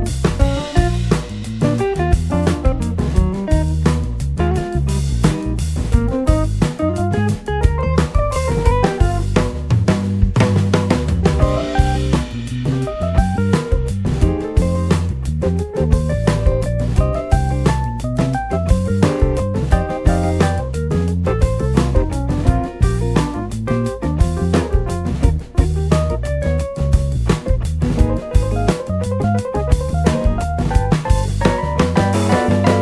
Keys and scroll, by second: 0.4-1.1 typing, 18.0-20.4 typing, 21.9-24.4 typing, 25.4 Return.